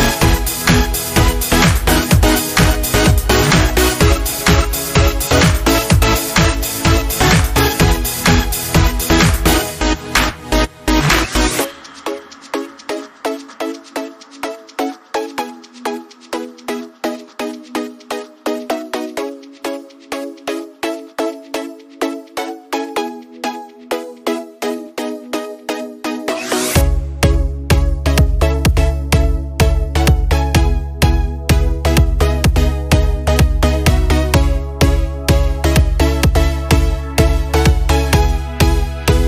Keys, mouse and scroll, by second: 3.1 alt+Caps_Lock, 7.9 click, 11.8 click, 14.4 scroll down 1, 16.1-22.8 drag, 24.8 Up, 26.8-39.2 drag.